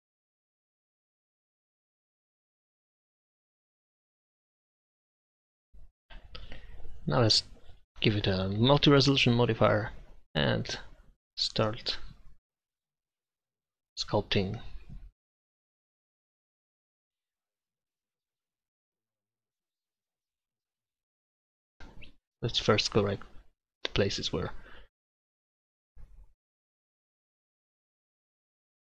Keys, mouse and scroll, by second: 2.6-3.9 middle drag, 3.9 click, 5.1-8.1 middle drag, 9.7 click, 10.4 middle click, 12.0-14.7 middle drag, 12.8-14.7 drag, 12.8-14.7 right drag, 15.0-16.7 drag, 16.7-17.9 middle drag, 19.0 middle click, 19.1 middle click, 23.0 click, 23.9-25.1 middle drag, 25.9 middle click, 26.7 f, 27.1 click, 28.0 click, 28.1 ctrl+z.